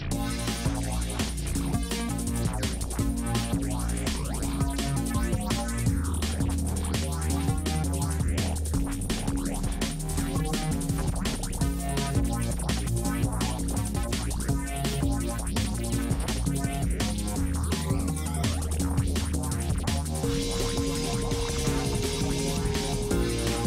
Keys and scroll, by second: 8.7 space, 11.2 space, 13.3 space, 19.4 space, 21.5 F9, 22.2 space, 23.0 space.